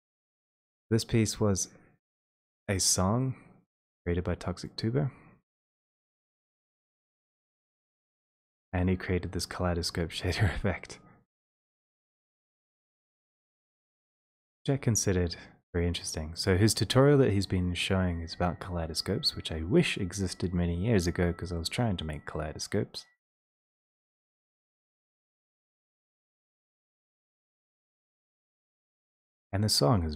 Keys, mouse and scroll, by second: 0.5 click, 7.7 click, 8.7-13.8 drag, 16.5-21.5 middle drag.